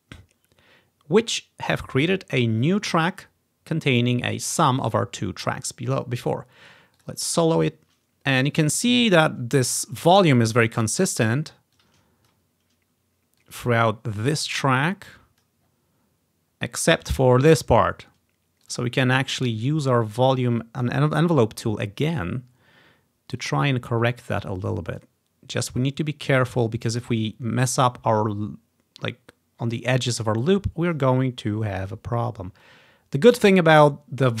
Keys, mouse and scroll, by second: 0.5-1.1 scroll down 2, 2.2 click, 2.7 click, 2.8 click, 7.1 click, 8.2 scroll down 2, 8.6 click, 11.8 click, 13.5 click, 14.4 scroll down 1, 15.2-18.1 drag, 15.4-18.1 scroll down 3, 18.7 click, 19.5-21.0 drag, 23.5-25.1 drag, 25.6-27.1 drag, 27.9-29.9 drag, 30.6 click, 31.6 click, 32.7-34.4 drag.